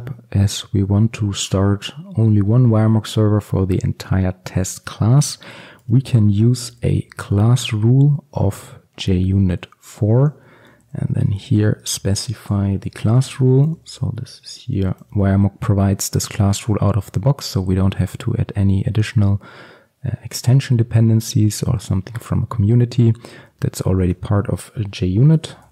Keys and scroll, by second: 7.5 Return, 23.5 Return.